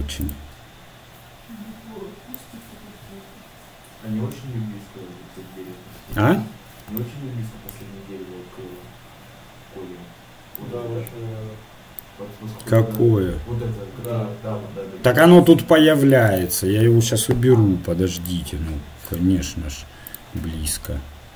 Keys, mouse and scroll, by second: 0.7-6.1 drag, 20.3-21.3 drag.